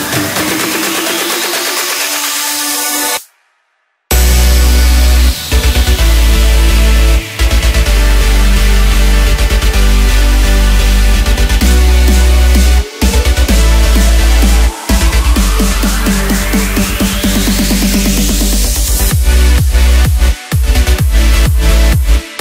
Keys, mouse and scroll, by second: 1.1 KP_1, 2.8 click, 3.3-4.1 scroll up 2, 4.1 1, 5.3 click, 10.0 click, 10.4-10.7 scroll down 1, 10.7 middle click, 11.2 scroll down 1, 11.4 middle click, 12.0 Tab, 12.4-14.7 middle drag, 14.7-15.9 right drag, 15.9-17.8 middle drag, 17.8-19.5 drag, 19.5-22.4 middle drag.